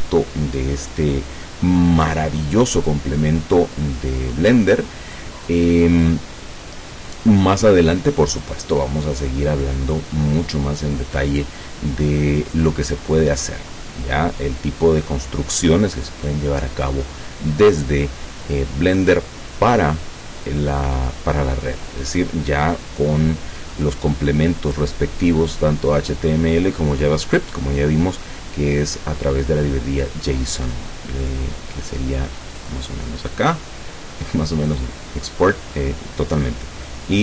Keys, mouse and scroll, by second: 0.1 click, 0.9 click, 1.7 scroll down 1, 2.1-5.1 drag, 5.1 scroll down 1, 5.2 click, 6.1-8.7 drag, 8.7 scroll down 1, 8.8-9.9 drag, 9.9 scroll down 1, 10.1-13.2 drag, 32.7 click, 34.7 click.